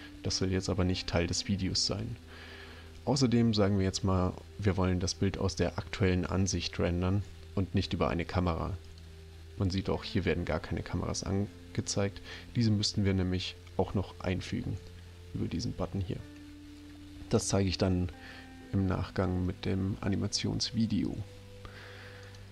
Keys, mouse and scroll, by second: 8.8 click, 11.7 click, 22.2 click.